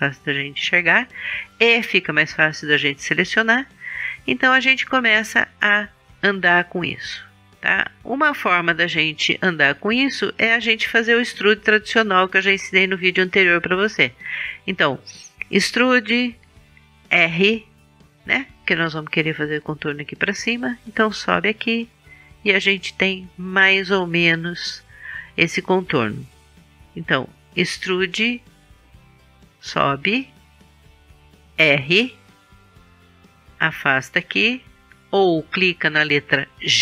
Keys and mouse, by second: 7.0-10.1 right drag, 10.1-12.7 middle drag, 12.7-15.4 right drag, 12.7 e, 15.4 middle click, 16.8 r, 20.9-23.1 drag, 27.8 e, 31.6 r, 32.8 click.